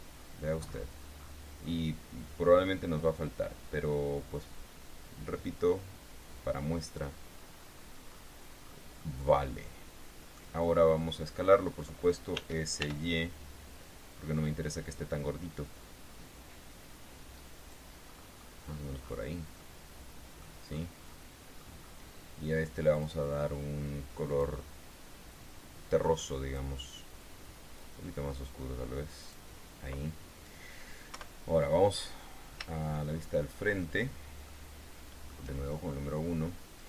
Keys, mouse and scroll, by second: 0.1-1.0 scroll down 1, 1.0-1.3 scroll up 1, 1.5 scroll up 1, 2.0 scroll down 1, 4.1-7.5 drag, 7.7-8.3 scroll up 1, 8.3-8.7 scroll up 1, 9.0 scroll down 1, 9.3-10.9 drag, 11.0-11.9 scroll down 3, 12.7 s, 13.1 y, 17.9 click, 18.4-18.9 scroll up 2, 19.1-19.7 scroll up 4, 19.9 click, 20.5 middle click, 21.0 scroll down 2, 21.5 middle click, 23.3 click, 24.7 click, 25.7-27.1 drag, 28.1-29.9 drag, 31.5 KP_1, 32.3-32.8 scroll up 2, 33.3-34.3 shift+middle drag, 34.8 shift+middle click.